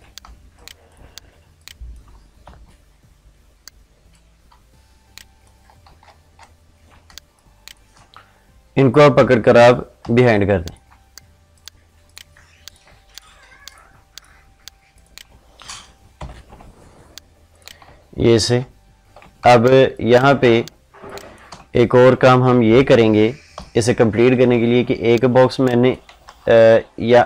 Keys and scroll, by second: 0.0 ctrl+space, 6.8 ctrl+space, 15.9 ctrl+shift+[, 19.2 ctrl+space, 26.0 ctrl+z.